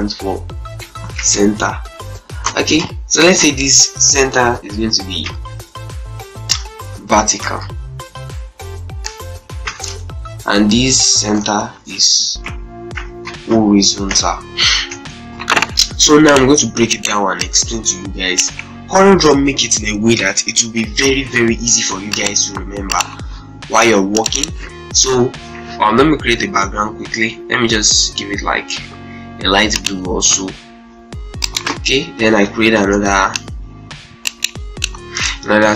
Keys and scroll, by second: 0.6-2.8 typing, 4.6 shift+9, 6.7 shift+v, 7.1 shift+e, 7.2 shift+r, 7.5 t, 9.1 shift+0, 9.6 Up, 10.6 Up, 11.2 End, 11.5-13.6 typing, 14.7 ctrl+space, 24.9 space, 32.5 ctrl+space.